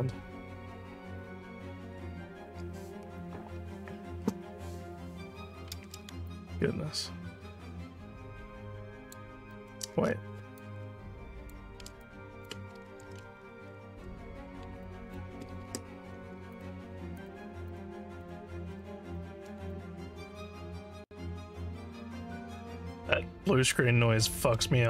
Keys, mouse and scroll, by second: 6.3-9.2 alt+drag, 9.6 alt+middle click, 10.1 scroll down 1, 10.6 shift+click, 12.0 alt+click, 12.9 ctrl+z, 14.8 alt+click, 15.6 ctrl+s, 16.5 shift+click, 17.2 shift+click, 17.7 shift+click, 18.2 shift+click, 18.7 shift+click, 19.2 shift+click, 19.7 alt+click, 20.7 ctrl+z, 22.6-23.7 alt+drag.